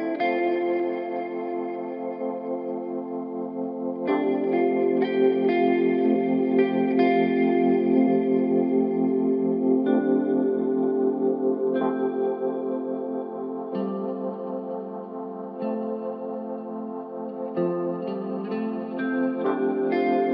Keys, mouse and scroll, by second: 0.1-1.5 drag, 1.5 g, 6.6-7.0 scroll down 2, 7.0-10.1 middle drag, 11.6 ctrl+KP_7, 12.4-13.1 scroll up 1, 13.1 g, 15.9 KP_7, 17.0-18.4 middle drag, 18.4-18.8 scroll down 3, 18.8-20.1 middle drag, 20.1-20.3 scroll up 2.